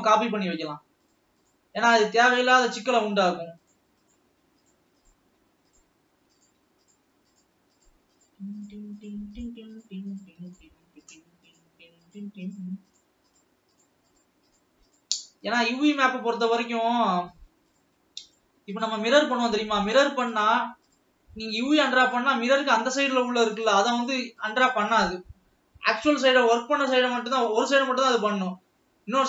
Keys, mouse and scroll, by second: 0.1 shift+click, 1.0 shift+click, 2.2 shift+click, 2.7 shift+click, 3.7 shift+click, 4.3 shift+click, 5.0 shift+click, 5.7-6.2 shift+drag, 6.9 shift+click, 8.5-9.6 shift+click, 9.6 shift+click, 11.1 shift+click, 12.0 shift+click, 12.9 shift+click, 13.7 shift+click, 15.4-16.0 shift+drag, 16.5-17.0 scroll up 4, 18.3 shift+click, 19.9 shift+click, 20.3 shift+click, 20.9-21.4 shift+drag, 22.0-22.5 shift+drag, 23.6 shift+click, 24.5-25.0 shift+drag, 25.2-26.2 scroll down 7, 26.5-28.1 middle drag, 28.1-28.9 scroll up 4, 28.9-29.2 middle drag.